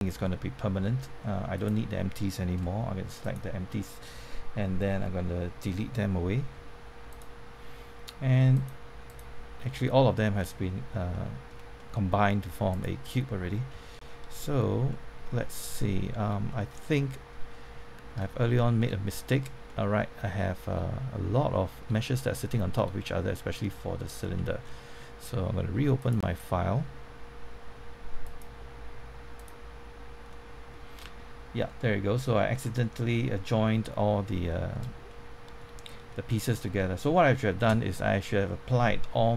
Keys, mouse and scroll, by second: 1.5 click, 4.9 Delete, 7.0 click, 9.6-11.1 middle drag, 11.6 scroll up 1, 11.7 middle click, 11.8 scroll down 1, 12.7 click, 13.7 Tab, 14.2 scroll up 1, 15.8 middle click, 15.8-16.2 scroll down 1, 16.2-16.6 scroll up 1, 16.6 scroll down 1, 16.9 middle click, 18.2 scroll down 1, 18.4 middle click, 21.1 scroll up 1, 21.5 middle click, 22.3 middle click, 24.2 Tab, 24.6-25.0 scroll down 1, 25.0 middle click, 26.0 click, 30.2 middle click, 31.6-33.3 scroll down 1, 34.4 middle click.